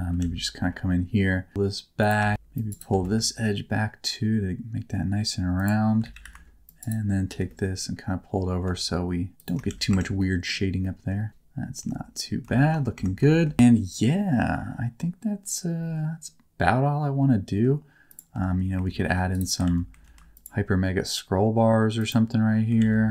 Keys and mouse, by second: 0.1 alt+z, 1.5 g, 2.2 shift+middle click, 2.3 alt+a, 2.3 c, 2.6 right click, 2.8 g, 5.5 right click, 5.9 alt+a, 6.1 c, 6.7 click, 7.2 g, 9.3 shift+click, 9.6 alt+z, 9.8 Tab, 10.1 middle click, 10.7 middle click, 11.7 Tab, 12.5 shift+middle click, 12.9 Tab, 13.2 shift+middle click, 13.5-17.6 middle drag, 18.0 click, 18.3 Tab, 18.8 ctrl+r, 19.6 alt+z, 20.0 ctrl+r, 21.9 click, 22.7 alt+z.